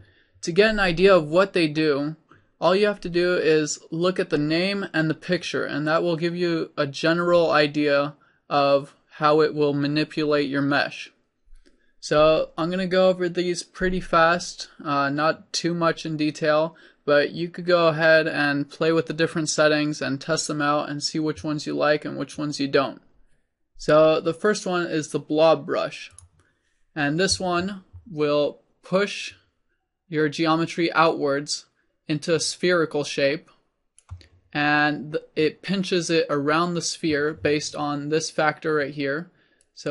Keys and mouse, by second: 29.3-31.3 drag, 35.9 middle click, 39.7-39.9 drag.